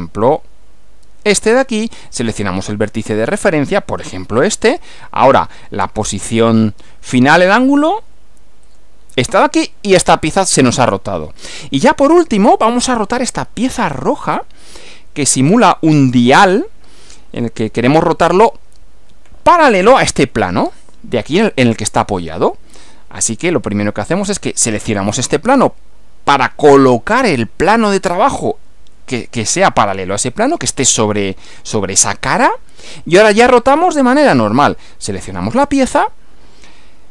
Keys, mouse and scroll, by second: 1.4 click, 4.0 click, 8.7 click, 11.2-11.6 scroll down 2, 12.6-13.5 shift+middle drag, 24.6 click, 26.7 click, 35.5 click.